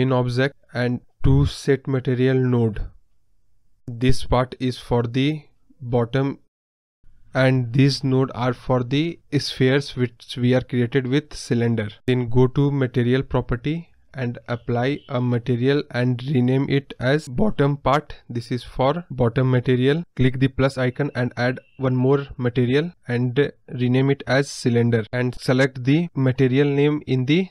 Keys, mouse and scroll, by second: 24.3-25.4 scroll up 2, 25.4-27.5 drag.